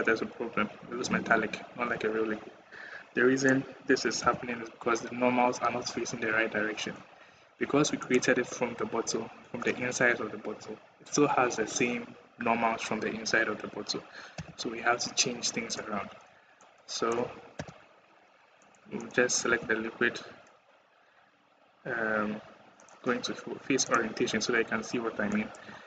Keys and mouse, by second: 0.8 click, 1.3 click, 1.5 click, 1.7 click, 4.1 /, 7.8 middle click, 14.2 /, 16.4 middle click, 16.8 middle click, 17.4 /, 18.1 middle click, 18.5 middle click, 18.9 middle click, 19.3 /.